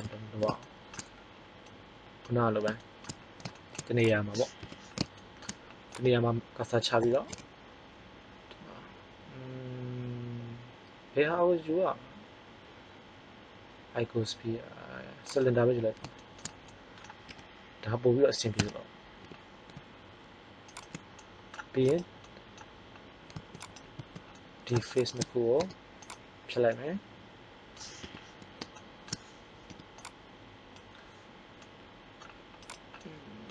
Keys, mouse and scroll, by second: 0.6 middle click, 3.6 middle click, 4.6 KP_1, 7.1 shift+a, 16.1 middle click, 17.3 KP_3, 18.5 Tab, 19.1 r, 21.1 middle click, 24.2 middle click, 25.5 x, 27.9 KP_1, 29.6 b, 32.6 right click.